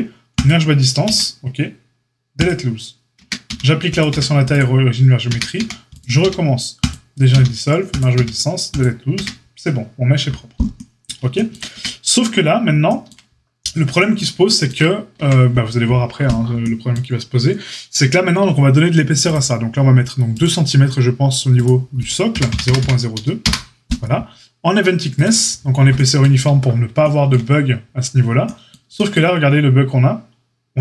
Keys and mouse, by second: 1.0 q, 3.1 Tab, 3.4 q, 4.0 q, 5.2 Tab, 5.5 a, 6.2 q, 7.3 q, 8.1 q, 9.1 Tab, 11.7 Tab, 15.1 Tab, 19.3-25.2 drag.